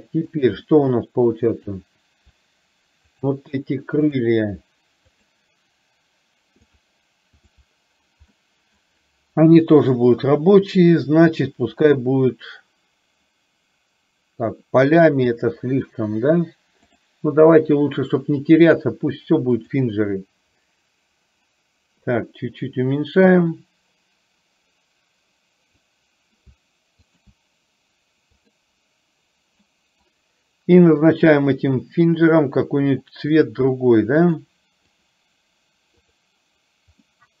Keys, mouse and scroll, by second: 0.7 middle click, 1.7 click, 3.2 shift+click, 5.2 shift+click, 6.7 shift+click, 7.5 shift+click, 8.5-8.9 middle drag, 11.9 click, 17.0-18.9 drag, 19.8 click, 22.2-25.9 drag, 27.2 shift+click, 28.4-29.0 drag, 29.7-30.3 middle drag, 33.5 click, 34.3 click, 37.2 middle click.